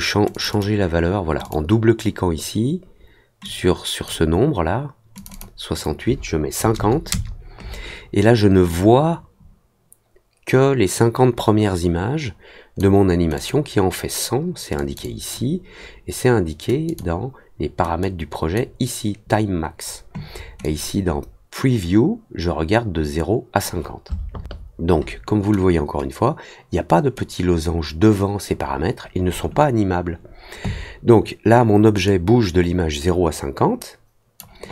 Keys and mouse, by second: 0.3 click, 0.5 click, 1.4 click, 3.4 click, 5.1 click, 5.3 click, 8.6-12.7 drag, 13.3 click, 14.7 click, 15.0 click, 16.8 click, 18.0 click, 20.6 click, 32.0-34.3 drag.